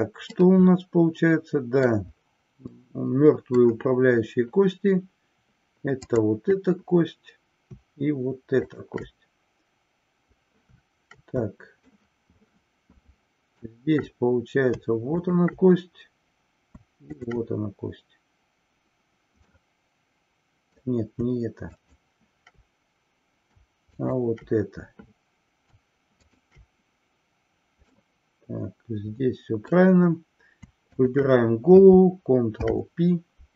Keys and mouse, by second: 0.5-2.2 middle drag, 2.9 middle click, 11.9-13.7 shift+middle drag, 15.2-16.2 shift+drag, 17.2 shift+click, 19.6-21.1 middle drag, 21.8-22.9 shift+drag, 24.1-25.1 shift+drag, 26.2-27.3 shift+drag, 28.1-29.9 middle drag, 30.9 shift+click, 32.6 ctrl+p.